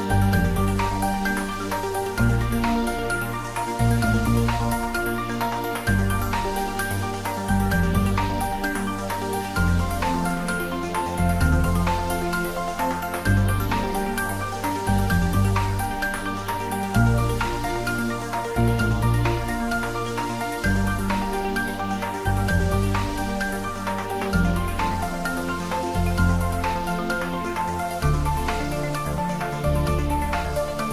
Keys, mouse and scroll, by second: 1.3 click, 3.5-9.0 middle drag, 9.0 click, 13.4 `, 13.7 3, 17.0 `, 17.4 3, 18.3-18.9 scroll up 1, 20.3 r, 22.1 click, 22.8 g, 29.1 click.